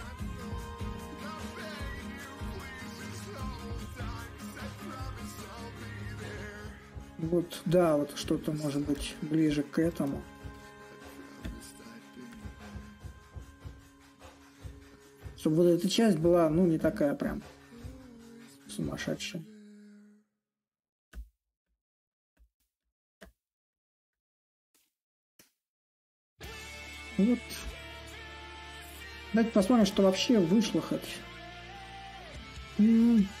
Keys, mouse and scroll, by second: 0.0-5.0 drag, 5.4-10.4 drag, 11.2-16.2 drag, 18.4-23.4 drag, 23.9-25.2 drag, 27.4-33.4 ctrl+drag.